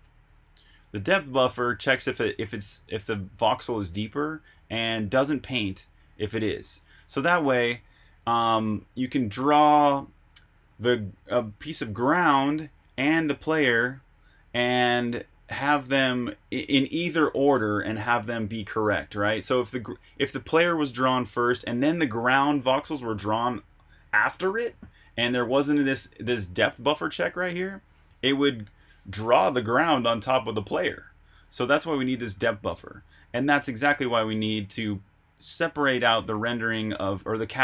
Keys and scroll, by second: 0.0-0.7 typing, 26.6 Escape, 26.7-28.6 typing, 31.3 Escape, 31.4-34.1 typing, 32.8 Escape, 34.3 Escape, 35.3 j.